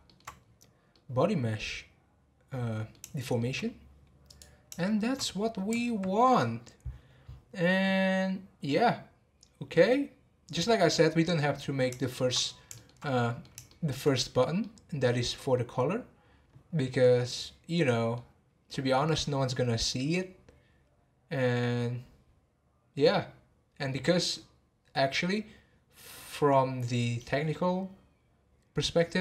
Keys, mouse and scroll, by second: 0.4-0.9 scroll down 2, 0.9-3.7 middle drag, 3.7 scroll down 2, 4.2 click, 4.8-8.4 shift+middle drag, 9.7-11.6 middle drag, 11.6 scroll up 1, 12.0-12.3 shift+middle drag, 12.3-12.7 scroll up 4, 12.7-16.9 shift+middle drag, 16.9 scroll down 2, 17.2-20.3 middle drag, 21.3-23.3 scroll down 1.